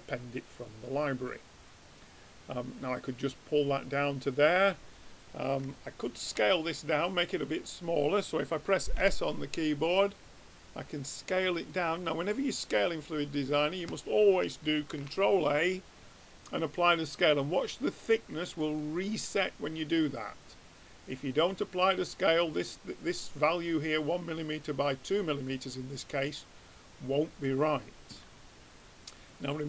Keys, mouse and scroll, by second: 4.7-6.3 middle drag, 6.4 middle click, 7.1-9.0 middle drag, 9.0 s, 14.9 ctrl+a, 21.1-22.9 drag, 25.4-27.3 middle drag, 29.2-29.6 drag.